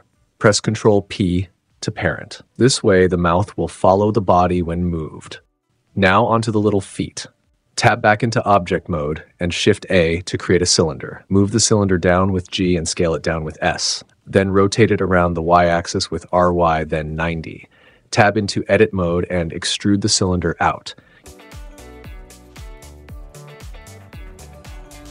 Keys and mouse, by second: 0.1 click, 1.0 ctrl+p, 2.6 click, 9.0 shift+a, 10.7 g, 10.9 z, 11.4 click, 11.6 s, 13.2 click, 13.7-14.7 typing, 15.0 click, 15.6 Tab, 16.2 click, 17.8 click, 18.6 e, 19.9-25.1 typing, 20.1 click, 21.1 click, 21.5 click, 21.6 super+z, 22.1 click, 22.3 click, 22.6 click, 22.9 click, 23.3 click, 23.5 click, 23.8 click, 24.2 click, 24.8 click.